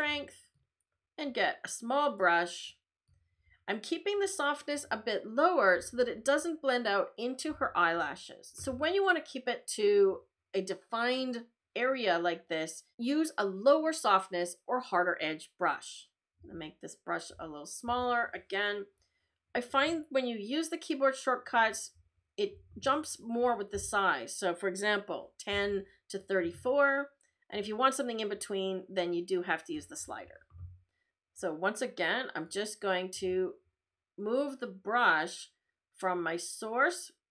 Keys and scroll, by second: 16.4 [, 17.9 ], 23.7 [, 25.5 ].